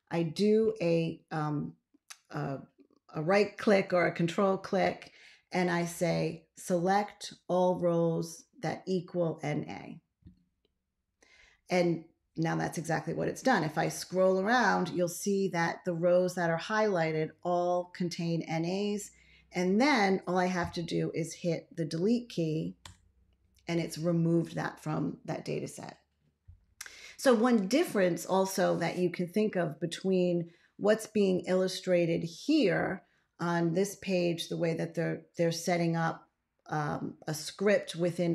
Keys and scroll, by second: 22.7 BackSpace.